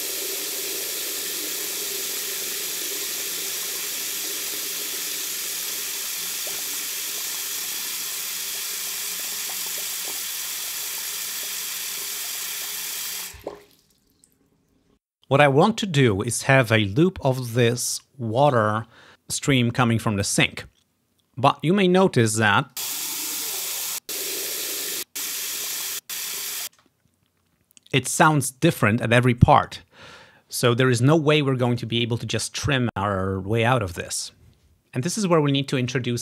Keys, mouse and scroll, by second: 15.2 space, 16.9-18.1 drag, 22.7-23.8 drag, 24.0 click, 25.1-26.1 drag, 26.8 space.